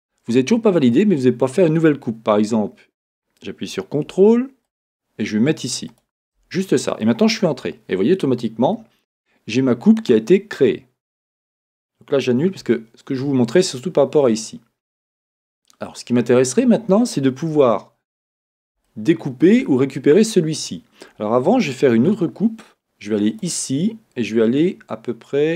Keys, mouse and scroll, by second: 7.6 Return, 12.6 z, 17.6-25.5 shift+middle drag, 18.4-18.8 scroll up 2, 22.0 k.